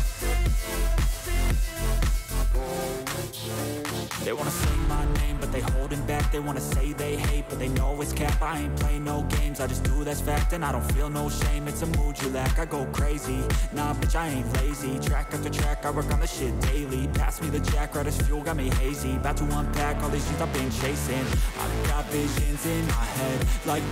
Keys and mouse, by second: 1.4 click, 2.9 middle click, 2.9 right click, 5.8 click, 8.2 click, 9.7 click, 12.1 click, 14.7-15.9 drag, 17.2 click, 18.2-19.4 drag, 21.3-22.5 drag.